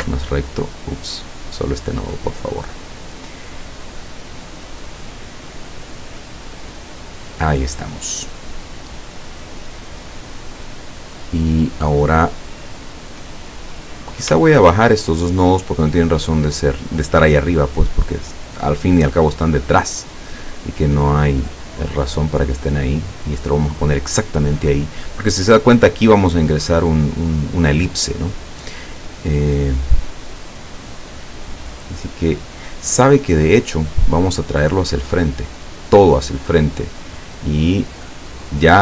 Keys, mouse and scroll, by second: 0.7 click, 1.1 click, 2.4 click, 3.9 click, 5.0 click, 6.4 click, 13.8 click, 14.7 shift+click, 15.7-18.7 drag, 20.7 click, 21.7-24.2 drag, 34.0 click, 35.4 click, 38.1 click.